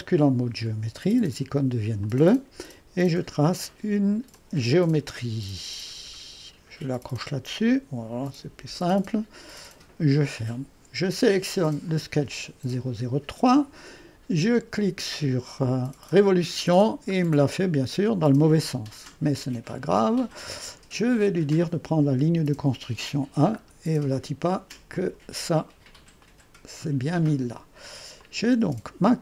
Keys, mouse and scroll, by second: 9.5 click, 11.9-15.0 drag, 16.1 click, 20.0 click, 22.6 click, 24.0-24.7 scroll up 1, 24.7 scroll up 1, 24.9 click, 25.7-27.1 scroll up 1, 27.1-27.7 scroll up 1, 27.7-28.2 scroll up 1, 28.2 click, 28.7 space.